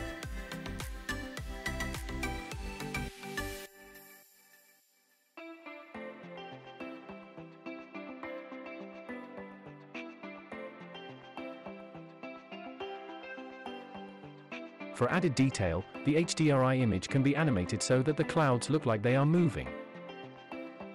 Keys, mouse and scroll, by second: 1.6-3.2 shift+middle drag, 8.1 click, 10.0 click, 13.9 space, 18.2 space.